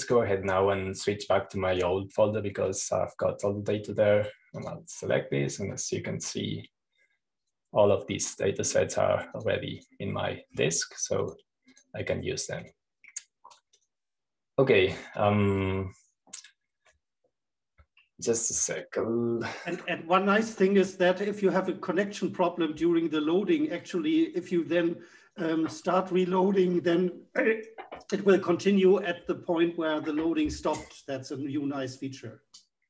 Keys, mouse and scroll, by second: 0.0 click, 1.6 click, 3.3 click, 4.3 click, 6.2 click, 7.3-9.0 scroll down 1, 9.0 click, 9.8 click, 10.9 click, 11.3 click, 12.8 click, 13.3 click, 14.2 click, 15.3 click, 19.5 super+f, 20.8 click, 24.3 super+t, 24.9-26.1 drag, 26.9 right click, 28.8 click, 30.8 super+f.